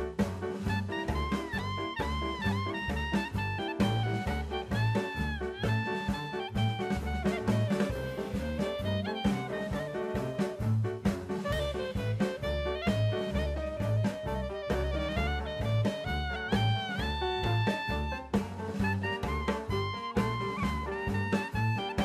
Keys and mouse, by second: 0.3 click, 1.6 KP_1, 3.1 click, 5.0 click, 7.7 middle click, 9.1 click, 10.1 middle click, 10.5 middle click, 13.3 click, 15.1 click, 19.1-19.7 shift+middle drag, 20.1-21.4 drag.